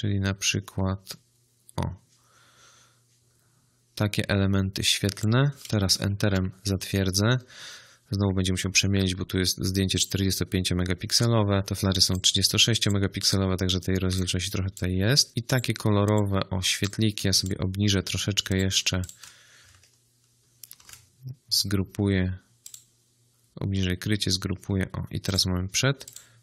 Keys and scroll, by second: 6.1 Return, 20.6 ctrl+g.